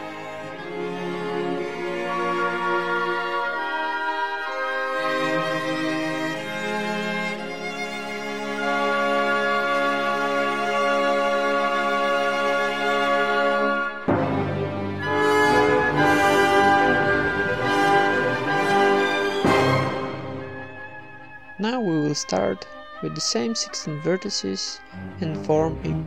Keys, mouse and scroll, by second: 0.0-2.8 typing, 0.0 right click, 0.2 Tab, 1.0-2.0 middle drag, 1.1 Tab, 2.0 ctrl+n, 2.1 middle click, 2.3 right click, 3.1 middle click, 3.9 click, 4.6 ctrl+r, 5.7 a, 5.9-6.9 right drag, 6.1-7.1 middle drag, 6.5 n, 6.7 alt+s, 7.6 s, 8.1 e, 8.3 s, 9.2 alt+s, 10.0 s, 10.9 e, 11.3 alt+m, 12.0 ctrl+Tab, 12.4 right click, 12.5 alt+s, 13.0 Tab, 13.2 middle click, 13.6 middle click, 13.8 Tab, 14.1 ctrl+KP_Add, 14.6 alt+s, 15.3 ctrl+KP_Add, 15.7 alt+s, 16.2 s, 17.0 right click, 17.3 ctrl+KP_Add, 17.6 alt+s, 18.0 Tab, 18.2-18.9 middle drag, 19.2 Tab, 19.8 middle click, 20.3 a, 20.4-21.9 right drag, 21.3 alt+s, 22.0 Tab, 22.0-24.4 typing, 22.8 ctrl+Tab, 23.4 right click, 24.7 Tab, 24.9-26.0 right drag, 25.2 Tab, 25.6 a, 25.8 s.